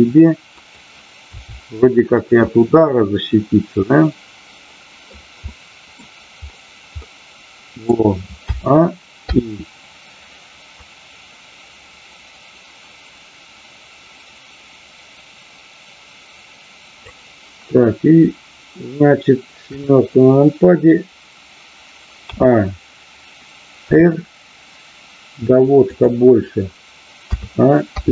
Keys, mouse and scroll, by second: 0.6 click, 2.1 drag, 2.5-5.1 middle drag, 5.4 middle click, 7.0-8.0 middle drag, 10.7-17.1 drag, 19.6 KP_7, 22.1 a, 23.7 r, 25.9 click.